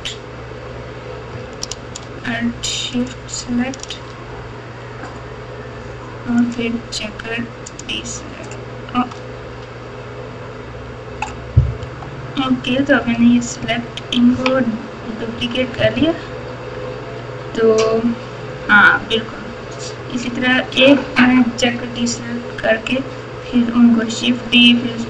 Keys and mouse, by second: 2.9 alt+shift+click, 6.5-7.8 drag, 11.8 Tab, 11.8-14.3 typing, 15.3 KP_6, 15.5 KP_6, 15.7 KP_6, 15.9 KP_6, 17.1 Tab.